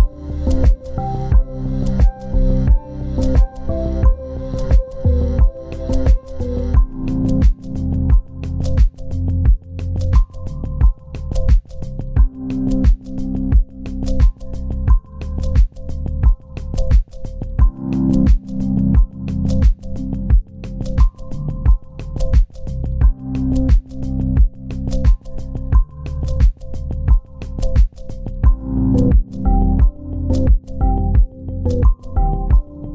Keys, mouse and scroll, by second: 1.3 ctrl+click, 1.7 ctrl+right click, 3.3 Left, 4.6 shift+click, 5.8 ctrl+g, 6.5 right click, 7.7 double click, 9.0-9.4 scroll down 1, 9.4 z, 10.7 ctrl+space, 10.9 ctrl+click, 11.2 double click, 21.4 w, 24.1 double click.